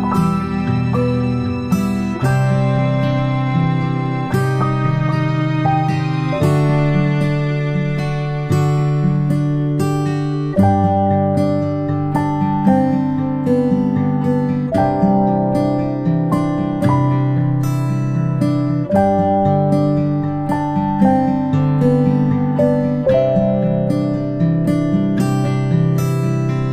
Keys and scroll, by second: 10.0 ctrl+z.